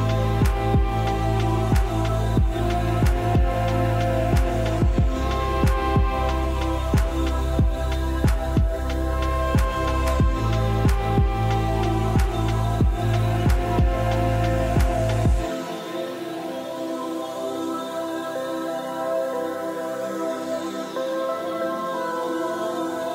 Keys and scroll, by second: 1.8-2.5 typing.